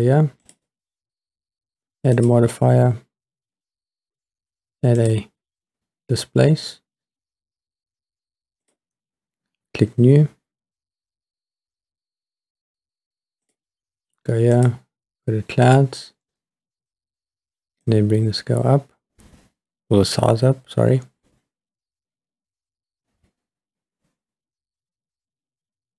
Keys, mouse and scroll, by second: 0.4 click, 2.1-5.1 drag, 8.6 click, 13.5 click, 14.6-15.8 drag, 17.9-19.2 drag, 20.2 click, 20.7-25.9 drag.